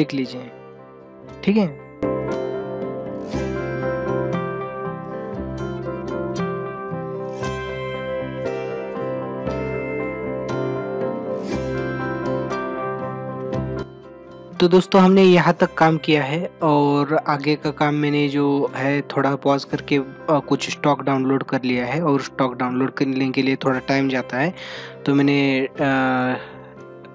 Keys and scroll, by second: 3.9 ctrl+alt+z, 4.7 space, 5.0 ctrl+-, 5.1 space, 5.5 ctrl+=, 5.9 ctrl+=, 7.9 ctrl+alt+z, 8.2 ctrl+=, 8.5 ctrl+=, 8.7-10.8 typing, 8.8 ctrl+-, 10.0 ctrl+-, 10.6 ctrl+-, 13.1 ctrl+=, 13.6 ctrl+-.